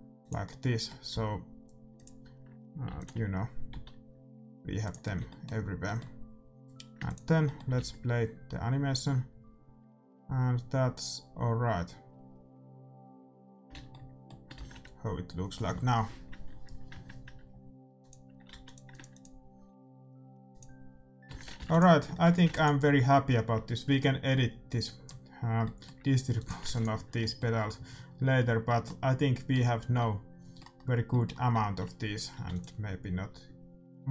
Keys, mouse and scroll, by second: 0.4 middle click, 1.1 s, 2.8 alt+d, 3.7 s, 5.0-6.3 middle drag, 5.1 a, 7.0-8.9 drag, 7.0-9.1 middle drag, 7.7 alt+a, 13.7 alt+a, 13.8-15.9 middle drag, 15.9 shift+z, 18.2-22.4 drag, 18.8 ctrl+s, 21.4 shift+z, 21.5 ctrl+s, 22.1-25.8 middle drag, 22.4 ctrl+s, 26.3-28.0 drag, 26.6 ctrl+s, 28.6-33.5 middle drag, 32.3 ctrl+s.